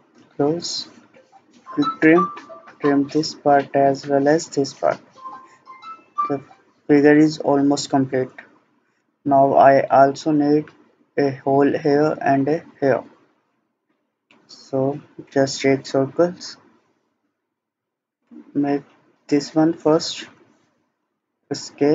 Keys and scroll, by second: 21.0 Escape.